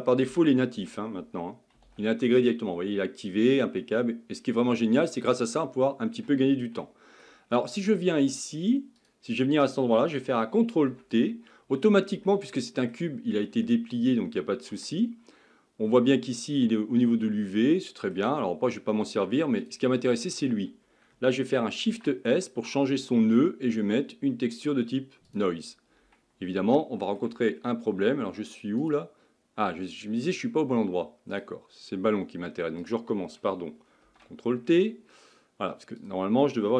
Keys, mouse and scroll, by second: 9.1 click, 10.8 ctrl+t, 11.8-12.3 scroll down 3, 17.5-19.7 middle drag, 19.7 click, 27.3-30.9 shift+middle drag, 31.3-34.1 drag, 34.1 ctrl+t, 36.2 click.